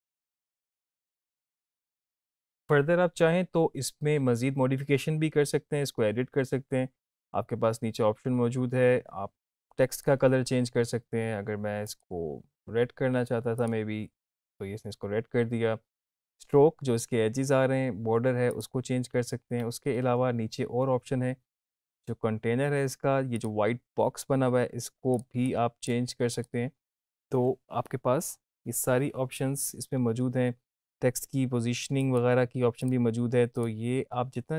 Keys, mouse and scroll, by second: 1.5 space, 1.5-2.1 drag, 18.5 click, 21.3-21.6 scroll down 1, 23.3 click, 29.9-31.5 scroll down 1, 31.5-34.5 scroll down 1.